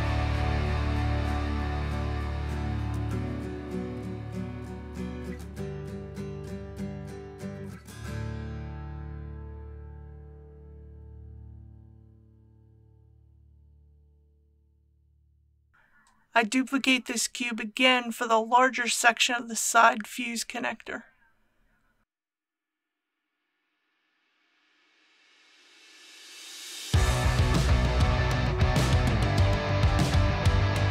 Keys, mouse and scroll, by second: 0.0-1.3 typing, 2.9-3.8 typing, 5.6 click, 5.9-6.3 typing, 8.3 click, 9.1-9.6 typing, 11.4 typing, 18.4 shift+d, 19.5-20.1 typing, 24.7-25.7 typing, 27.5-28.2 typing, 30.7 typing.